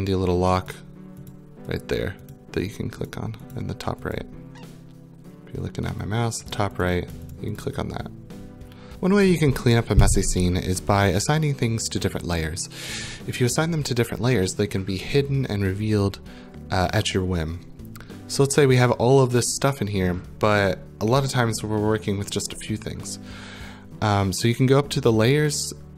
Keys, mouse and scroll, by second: 0.7 click, 1.3 click, 1.8 click, 2.3 click, 2.7 click, 3.1 click, 3.5 click, 4.2 click, 6.5 click, 6.8 click, 7.1 click, 7.3 click, 7.6 click, 8.9 click.